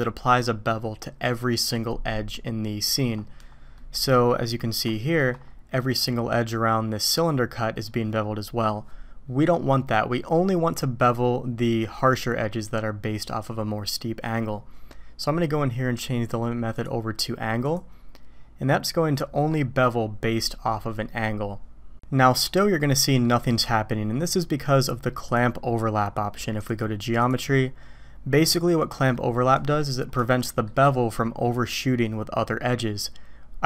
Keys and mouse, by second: 3.8 middle click, 4.9 shift+middle click, 16.8-17.8 drag, 18.8-19.5 drag, 22.8-23.2 middle drag, 25.3 click, 26.6 click, 27.2 click, 29.1-29.8 middle drag, 30.3-30.6 shift+middle drag.